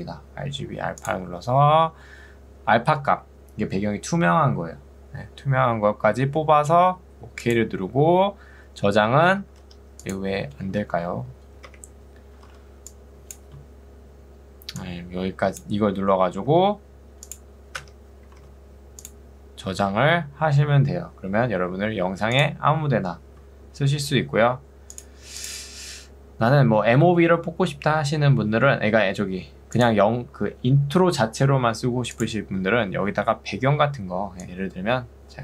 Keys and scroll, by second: 1.4 ctrl+2, 9.8 2, 11.0 ctrl+1, 11.8 Escape, 12.6 ctrl+2, 16.6 Escape.